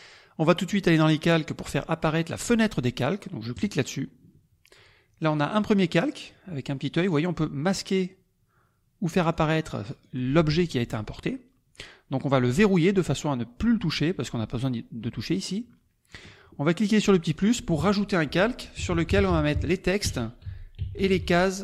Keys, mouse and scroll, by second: 0.9 click, 3.5 click, 7.2 click, 8.0 click, 9.5 click, 10.0 click, 12.8 click, 15.6 click, 17.3 click, 18.5-21.6 typing.